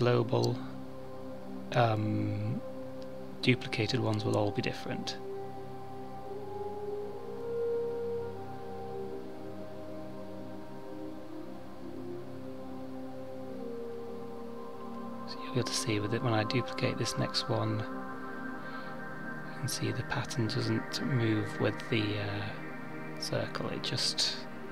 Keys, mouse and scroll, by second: 1.7 click, 4.2 click, 5.4 click, 8.8 middle click, 12.6 middle click, 13.8 KP_7, 15.7 click, 17.6 shift+d.